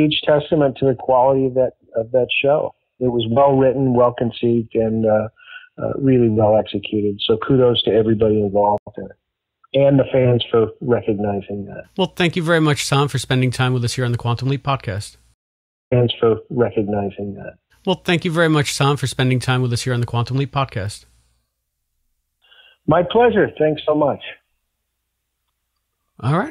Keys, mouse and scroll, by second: 0.0 ctrl+s, 1.2 click, 2.2 click, 3.1 click, 3.8-4.8 drag, 5.6 click, 6.3 click, 7.5-8.5 drag, 8.7 Delete, 9.3 click, 10.1-11.3 drag, 13.1 click, 14.4 click, 15.2 space, 15.7 click, 15.8 space, 16.5 click, 17.5 click, 18.0 click, 18.7 click, 19.4-21.0 drag, 21.3 click, 22.2 click, 23.1 click, 25.2-26.3 drag.